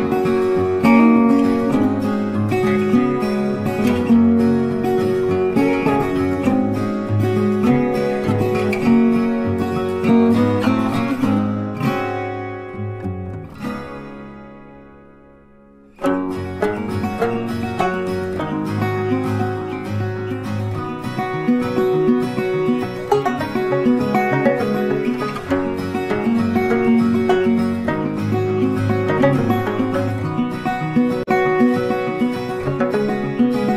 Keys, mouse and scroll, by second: 0.9 ctrl+space, 1.0 ctrl+click, 1.1 ctrl+space, 2.2 space, 4.3 ctrl+click, 7.6 ctrl+click, 8.6 shift+click, 12.0 space, 12.1 double click, 12.2 space, 12.7 double click, 14.8 double click, 26.2 space, 33.2 space.